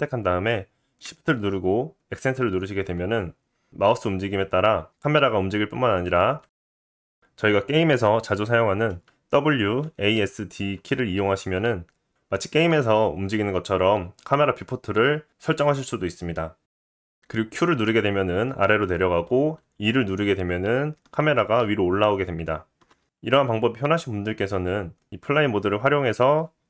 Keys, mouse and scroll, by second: 1.0-25.2 shift+middle drag, 2.1 shift+`.